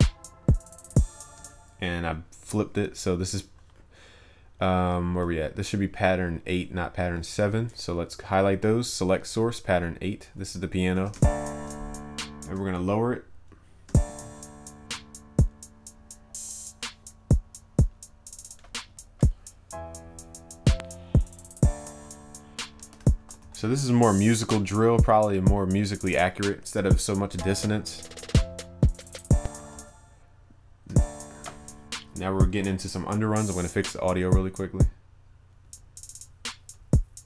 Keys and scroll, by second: 10.9 ctrl+s, 23.4 ctrl+s.